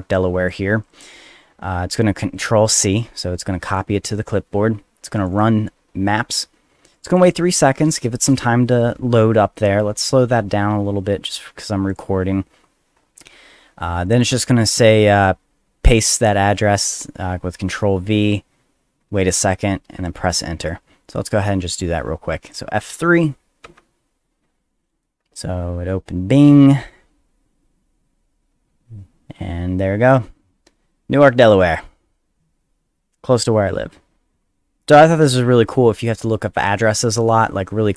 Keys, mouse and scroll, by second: 0.8 click, 1.9 click, 3.3 click, 5.2 click, 5.3 click, 6.9 click, 7.1 click, 11.9 click, 14.1 click, 20.6 click, 21.4-22.5 drag, 23.6 F3.